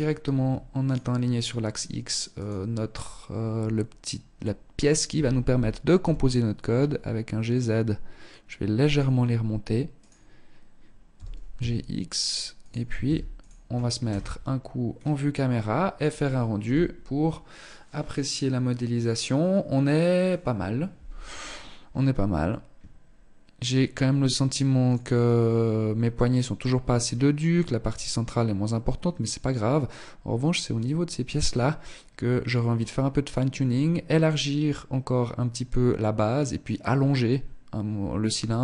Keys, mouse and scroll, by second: 0.0 shift+right click, 1.5 shift+right click, 4.2 g, 9.2 right click, 10.2 g, 12.2 ctrl+s, 13.2 KP_0, 14.0-14.7 scroll down 3.